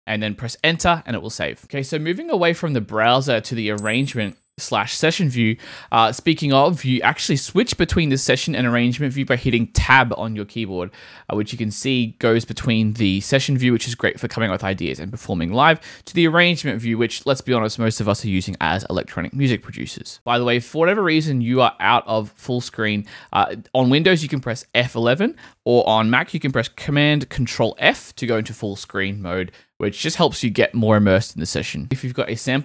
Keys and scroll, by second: 0.0-0.3 typing, 8.5 Tab, 9.8 Tab, 10.7 Tab, 12.0 Tab, 15.6 Tab, 20.9 Home, 27.7 ctrl+super+f.